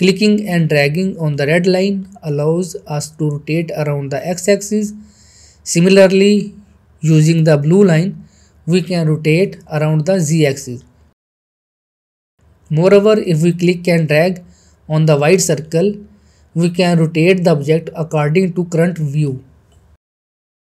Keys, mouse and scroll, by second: 0.0-3.5 drag, 4.7 ctrl+z, 5.6-9.9 drag, 10.1 ctrl+z, 10.5-11.7 middle click, 16.1 shift+middle click, 16.2-16.8 middle click, 17.4-20.7 drag.